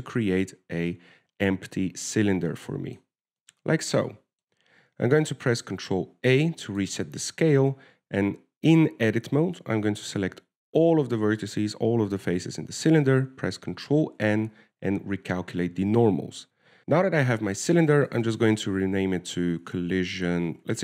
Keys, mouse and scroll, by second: 3.9 middle click, 4.4 Tab, 4.8 middle click, 7.4 ctrl+a, 8.7 Tab, 10.9 a, 11.1 a, 15.4 ctrl+n, 16.8 shift+Tab, 16.8 shift+middle click, 16.8-17.1 scroll down 2, 18.9 w, 19.4 click, 19.6 click.